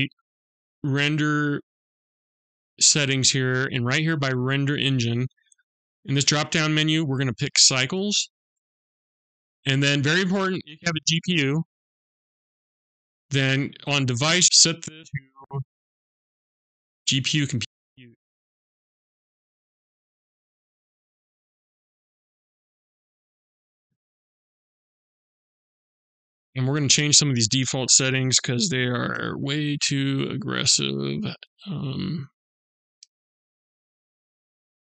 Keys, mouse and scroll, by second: 5.5 click, 14.8 click, 26.7 click, 30.4 click, 32.2 click, 34.0 click.